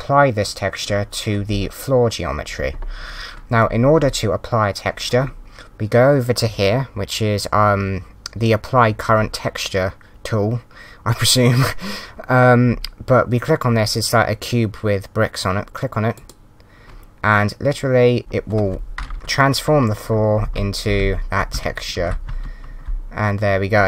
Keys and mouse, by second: 16.1 click, 18.2 click, 20.3 d, 20.4 Down, 20.4 Left, 20.9 s, 21.0 Down, 21.5 d, 21.9 Up, 21.9 Right, 22.2 a, 22.3 Right.